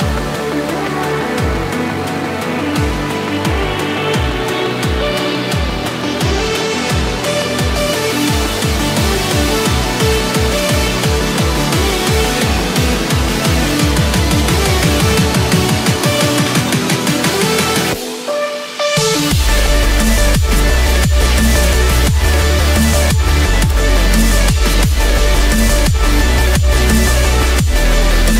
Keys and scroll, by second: 18.2 ctrl+-.